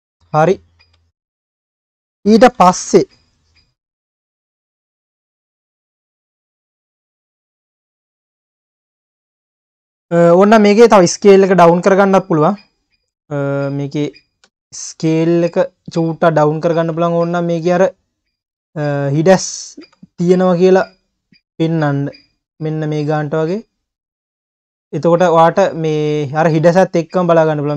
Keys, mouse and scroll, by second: 0.2 q, 1.3 click, 2.6 KP_Decimal, 3.9 KP_9, 5.0 KP_1, 7.2 ctrl+s, 7.4 click, 7.7 scroll down 2, 7.9 q, 8.4 ctrl+s, 8.6-9.0 scroll down 6, 9.4-9.7 scroll down 1, 9.7-10.6 scroll up 6, 10.6 click, 11.3 KP_3, 12.2-12.7 scroll up 5, 13.1-13.5 scroll up 3, 13.5 Tab, 14.4 a, 15.7 click, 16.9 s, 19.3-19.8 scroll up 1, 19.8 s, 22.7-23.1 scroll down 5, 23.1 Tab, 24.0 click, 24.4 Tab, 24.8-25.5 scroll down 6, 25.5 Tab, 25.9 click, 26.3-27.3 scroll up 11, 27.3 q.